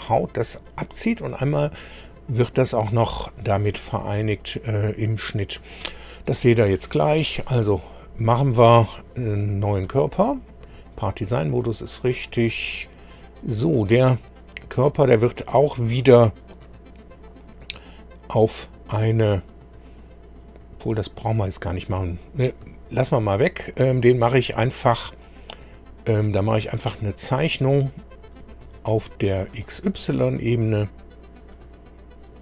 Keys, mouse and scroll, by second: 8.9 scroll down 1, 9.8 click, 12.0 click, 14.5 scroll down 1, 16.5 click, 17.1 scroll down 1, 28.2 click, 29.5 click, 31.5 click.